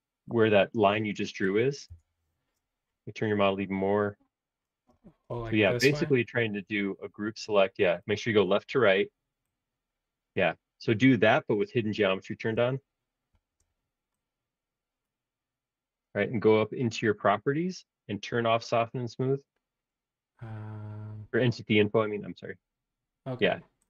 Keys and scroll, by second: 1.9 BackSpace, 4.9 Escape, 13.4 shift+g.